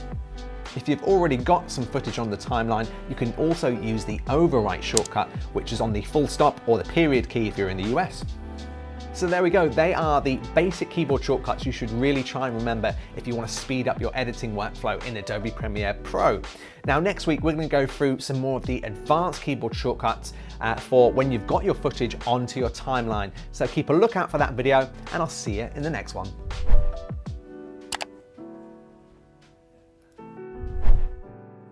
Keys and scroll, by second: 4.6 ..